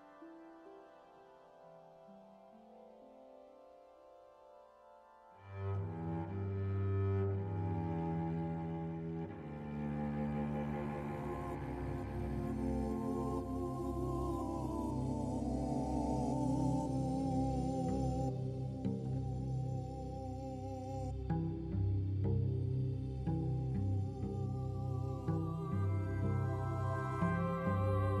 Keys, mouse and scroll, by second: 0.4 c, 0.8 g, 2.9 alt+right click, 3.3 g, 4.5 alt+right click, 5.1 alt+right click, 5.3 c, 5.8 g, 7.3 middle click, 8.2 scroll up 1, 8.7 right click, 8.7 c, 9.4 g, 10.7 middle click, 11.8 right click, 12.7 c, 15.0 s, 18.0 alt+right click, 18.6 s, 20.1 middle click, 20.8 alt+right click, 21.4 right click, 22.0 s, 23.9-25.0 scroll down 3, 24.1 middle click, 25.0 middle click, 25.4 Tab, 25.6 middle click, 27.3-28.2 scroll up 2, 27.5 middle click.